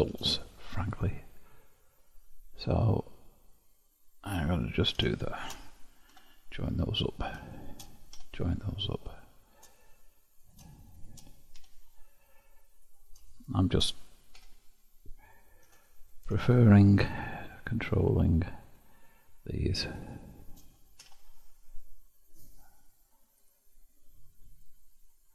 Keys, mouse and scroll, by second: 0.6-1.6 scroll up 2, 1.6-2.4 scroll down 1, 2.4-4.5 scroll down 1, 4.5 click, 5.3 shift+click, 6.2 j, 7.2-8.2 drag, 8.2 j, 9.2-10.5 shift+middle drag, 10.5 click, 11.0 shift+click, 11.6 j, 12.9 click, 13.6 shift+click, 14.4 j, 15.8-18.6 drag, 18.7 shift+click, 20.0 shift+click, 21.1 ctrl+x, 23.5-25.3 drag.